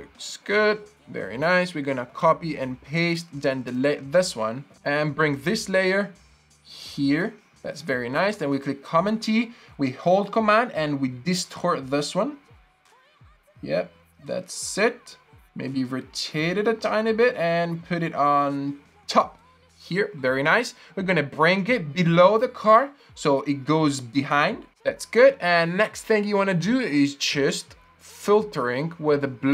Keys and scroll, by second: 2.0 super+c, 2.2 super+v, 3.7 BackSpace, 3.7 Delete, 4.7 v, 8.5 super+t, 19.2 Return.